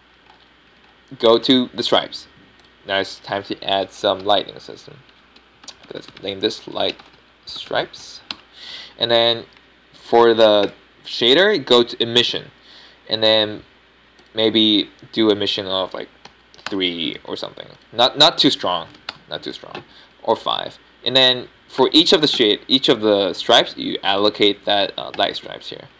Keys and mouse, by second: 0.7 Tab, 3.3-4.5 middle drag, 12.5-21.9 drag, 22.1-23.7 middle drag, 23.7-25.3 right drag, 25.3 middle click.